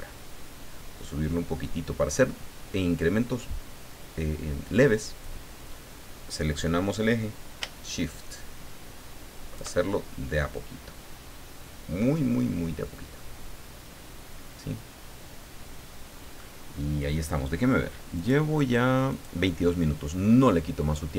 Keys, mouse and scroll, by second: 5.2-9.7 drag, 9.9-16.4 shift+middle drag, 16.4 scroll up 2, 16.5 scroll down 2, 18.1 click, 19.1 click, 19.9-20.4 scroll down 2, 20.4 middle click.